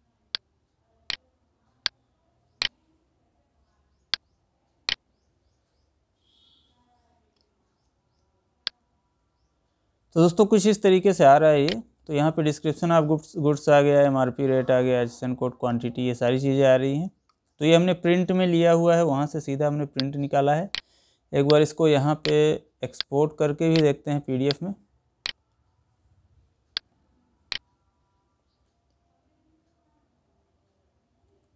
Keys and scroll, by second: 28.3 Down, 31.1 Up.